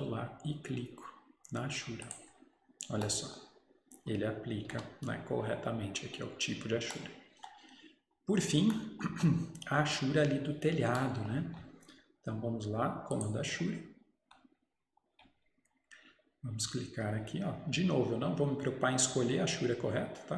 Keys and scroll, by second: 9.2 Escape.